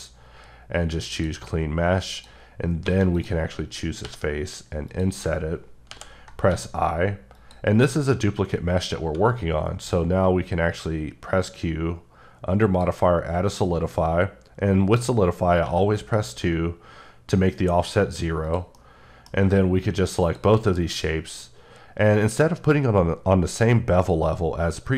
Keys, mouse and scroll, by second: 1.3 click, 2.2 click, 2.8 3, 3.1 click, 4.0 i, 4.9 click, 5.9 i, 6.5 x, 7.3 click, 7.9 middle click, 9.7 q, 12.6 click, 17.7 2, 18.5 click, 18.7 middle click, 20.2 shift+click, 22.9 q.